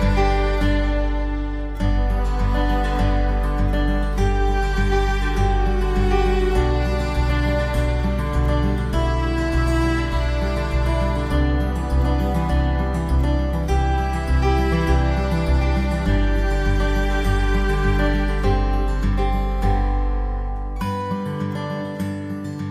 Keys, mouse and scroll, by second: 0.1 ctrl+s, 0.7-1.2 scroll down 2, 1.2 middle click, 1.7-2.4 scroll up 5, 2.7 right click, 3.7 shift+right click, 4.4 j, 5.2 right click, 5.9 shift+right click, 6.8 j, 7.6 right click, 8.5 shift+right click, 9.3 j, 9.9 right click, 10.6 shift+right click, 11.3 j, 12.2 right click, 12.9 right click, 13.6 j, 14.2 right click, 14.9 shift+right click, 15.5 j, 16.3 right click, 17.0 shift+right click, 17.7 j, 18.7 right click, 20.0 shift+right click, 20.9 j, 21.8 right click.